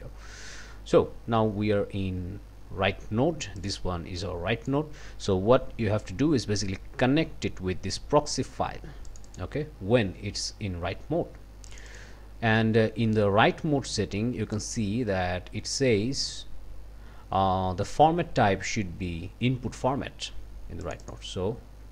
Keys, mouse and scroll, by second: 4.2 click, 6.0-8.5 drag, 9.1 click, 11.7 click, 14.5 click, 20.8 click.